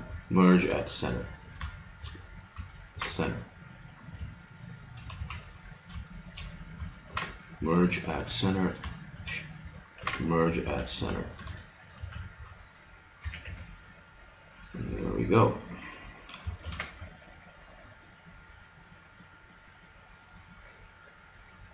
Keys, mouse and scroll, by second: 1.4-3.5 right drag, 3.0 alt+m, 4.5 middle click, 5.2 z, 6.0-7.8 drag, 7.1 alt+m, 8.5 click, 8.7-10.7 right drag, 10.0 alt+m, 11.0 a, 11.5 middle click, 12.0 a, 12.4 z, 13.2 a, 13.4 Tab, 14.8 middle click, 16.6 shift+s.